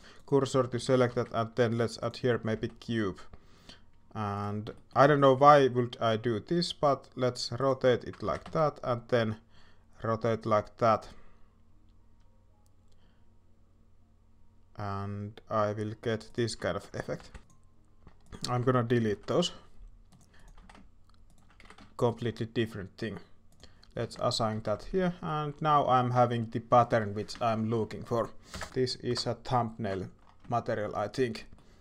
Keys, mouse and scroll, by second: 0.0 alt+a, 0.0 shift+s, 0.7 alt+a, 2.5 s, 4.7 shift+middle click, 5.3 r, 8.2 r, 16.6 shift+middle click, 17.2 shift+d, 17.4 alt+a, 17.4-18.5 drag, 20.3 s, 20.3 g, 20.6 s, 21.6 g, 24.0 Tab, 25.0 shift+middle drag, 25.7 shift+middle click, 26.1 shift+middle drag, 26.7 shift+middle click, 27.3-27.7 shift+middle drag, 27.8 middle click, 28.5 KP_0, 28.5 KP_1, 28.7 middle drag, 29.1 KP_0, 30.5 shift+middle click, 31.4 middle click.